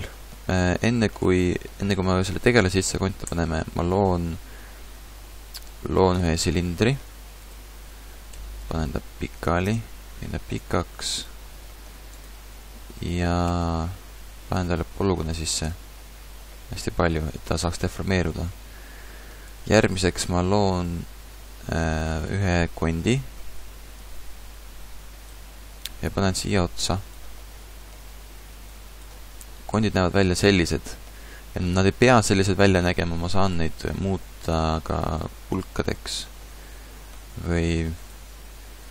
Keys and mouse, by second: 3.2 shift+a, 6.7 g, 8.3 r, 11.1 s, 11.6 s, 12.5 Tab, 13.5 ctrl+r, 16.1 Tab, 16.9 Tab, 17.2 Tab, 20.1 shift+a, 28.7-29.7 drag, 29.7 KP_Decimal, 30.5 middle click.